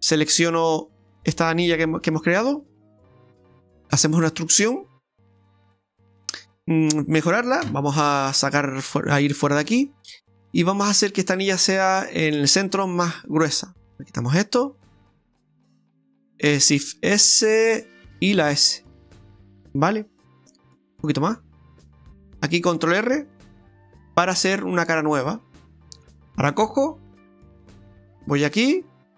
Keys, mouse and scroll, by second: 3.7 e, 5.9 middle click, 6.4 middle click, 9.2 middle click, 9.6 KP_Divide, 10.1-11.0 scroll up 6, 11.0 middle click, 11.7 shift+middle click, 13.9 click, 14.9 right click, 15.5 alt+shift+right click, 15.6 alt+shift+right click, 16.1 middle click, 17.1 shift+s, 18.5 s, 20.8 s, 22.0 middle click, 23.5 ctrl+r, 25.0 middle click, 25.6 shift+middle click, 27.1 click, 28.4 alt+shift+right click, 28.8-29.1 scroll down 4.